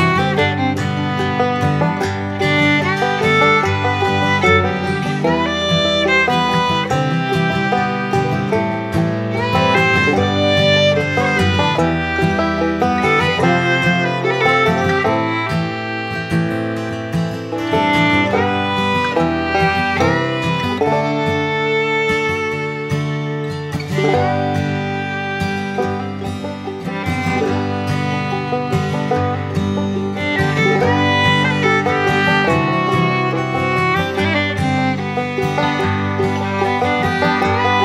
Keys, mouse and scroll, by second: 3.3 right click, 4.0 click, 6.6-10.2 drag, 16.2-17.9 drag, 17.6-18.4 typing, 24.6 click, 26.8 click, 30.5 click, 32.1-34.3 drag.